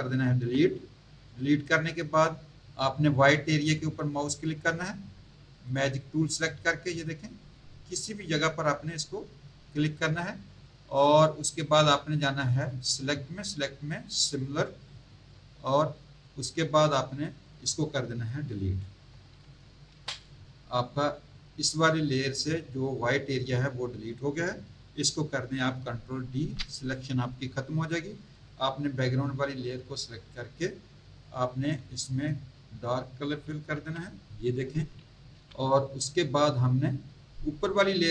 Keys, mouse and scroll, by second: 0.4 Delete, 5.6 click, 7.3 click, 12.8 click, 14.8 click, 16.8 click, 19.8 Delete, 26.3 ctrl+d, 28.3 click, 35.3 v, 37.0 scroll up 1, 37.6 click.